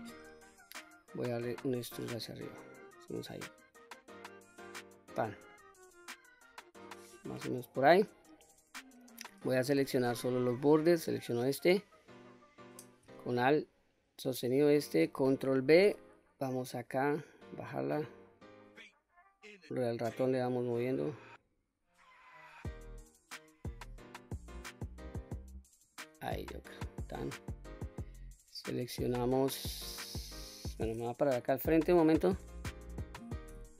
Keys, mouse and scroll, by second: 0.1 middle click, 1.5 e, 5.0 click, 5.6 scroll down 1, 5.9-6.9 middle drag, 7.4-8.0 middle drag, 8.3-8.8 scroll up 2, 8.8 middle click, 9.8 2, 10.4 click, 13.5 alt+click, 14.8 middle click, 15.6 ctrl+b, 18.0-18.5 scroll up 1, 21.0-23.8 scroll up 1, 24.0-24.9 scroll up 1, 24.9-25.9 scroll down 1, 25.9 click, 26.3-27.2 middle drag, 27.8 click, 29.0-29.3 middle drag, 31.4 KP_1, 33.5 q.